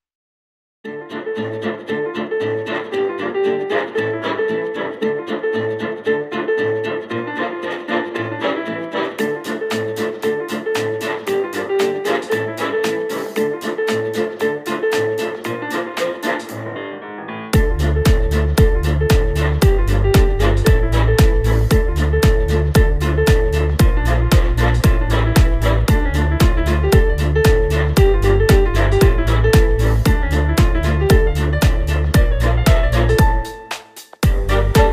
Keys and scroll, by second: 12.9 space, 16.7 space, 17.2 space, 28.8 space, 29.2 space, 34.0 space.